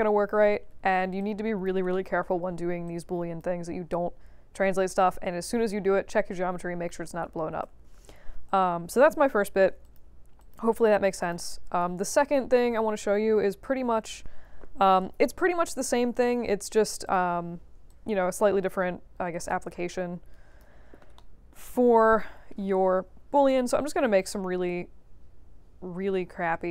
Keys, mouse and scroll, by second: 0.5 middle click, 0.5 scroll down 2, 1.1 alt+click, 1.9 alt+middle click, 2.4 alt+middle click, 2.4-2.7 alt+scroll down 2, 2.8 alt+click, 7.8 ctrl+z, 9.8 shift+click, 10.3 shift+click, 11.2 shift+click, 17.0 click, 17.8-19.3 drag, 19.6 click, 21.1 alt+middle click, 21.7 scroll up 2, 22.2 scroll down 2, 23.3-26.7 drag.